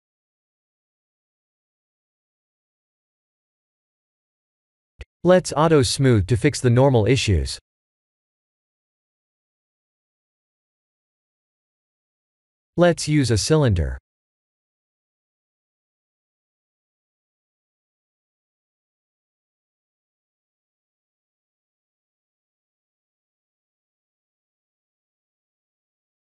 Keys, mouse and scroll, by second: 1.6 middle click, 2.4 middle click, 5.6 click, 6.8 click, 8.0 click, 8.6 click, 8.9 middle click, 11.8 middle click, 12.5 click, 12.7 shift+a, 18.1 s, 19.6 g, 20.9 s, 23.4 middle click, 23.5 middle click, 25.1 middle click, 25.6 KP_1.